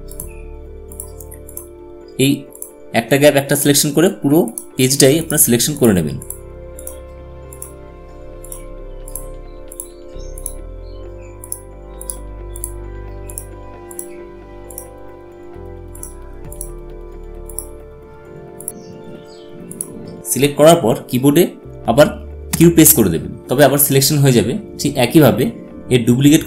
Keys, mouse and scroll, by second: 19.4 click, 22.2 q.